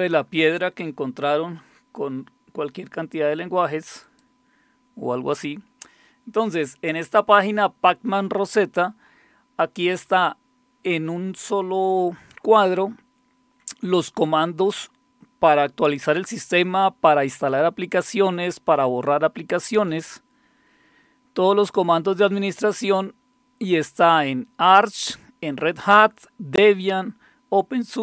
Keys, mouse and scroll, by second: 4.0 click, 9.2 scroll down 2, 9.8 scroll down 2, 12.8-13.5 scroll down 1, 17.3-18.0 scroll down 2, 19.1 scroll down 1, 19.8 scroll down 2, 20.4 scroll down 2, 21.1 scroll down 2, 21.9-22.9 scroll up 4, 24.2-25.0 scroll down 3.